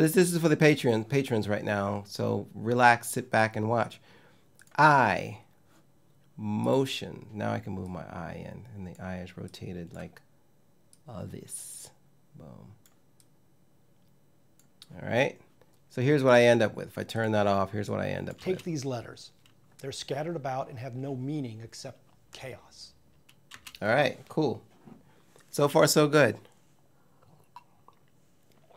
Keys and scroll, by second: 18.0 space, 23.2 space.